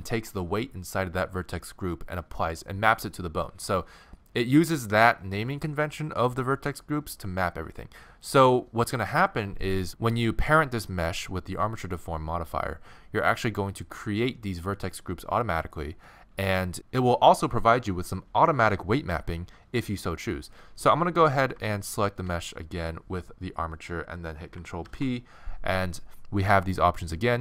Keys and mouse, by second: 21.8-23.5 right drag, 24.8 ctrl+p.